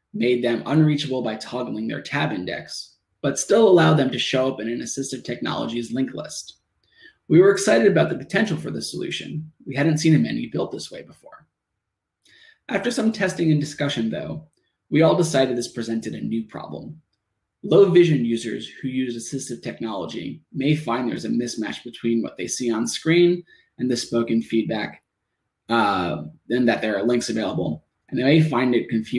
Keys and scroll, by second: 0.6 shift+Tab, 4.8 Return, 5.3 shift+Return, 5.7 shift+Tab, 8.7 Tab, 12.0 shift+Tab, 15.2 Tab, 16.7 Tab, 18.2 shift+Tab, 20.8 shift+Return, 23.0 Tab, 27.3 shift+Tab.